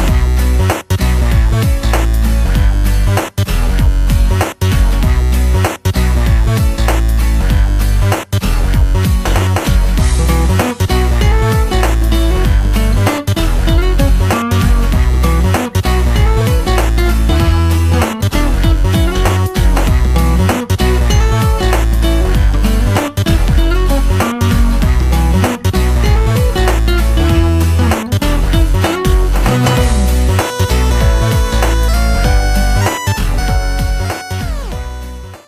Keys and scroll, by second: 10.3 space, 10.8 space, 11.3 space, 11.9 space.